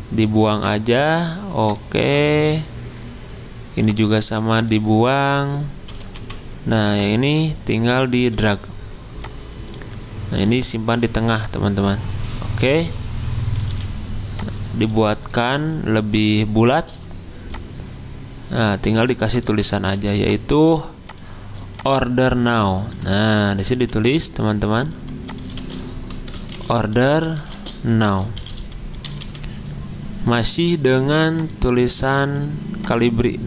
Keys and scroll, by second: 5.9 h, 6.2 g, 9.7-10.4 typing, 13.7 a, 16.9 v, 23.7 t, 24.9 t, 26.3-29.7 typing, 31.9-32.7 typing.